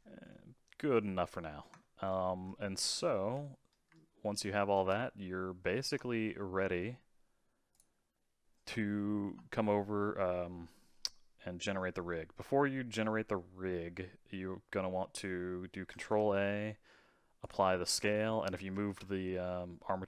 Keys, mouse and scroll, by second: 0.3 middle click, 1.1-1.8 scroll down 5, 1.8-3.3 shift+middle drag, 3.3 a, 3.4-5.9 middle drag, 5.9 Tab, 6.2-6.6 scroll down 4, 6.6-7.7 middle drag, 7.7 click, 15.9 ctrl+a, 18.7 ctrl+a.